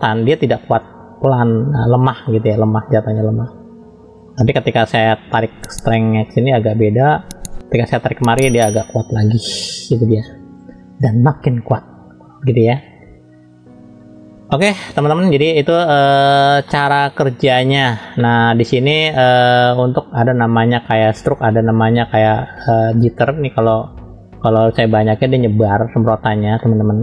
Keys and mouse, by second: 0.7 click, 5.4 click, 6.4 click, 7.5 click, 8.8 click, 10.2 click, 11.0 click, 12.7-13.9 middle drag, 15.0 middle click, 16.7 middle click, 21.3-25.8 drag, 26.6 middle click.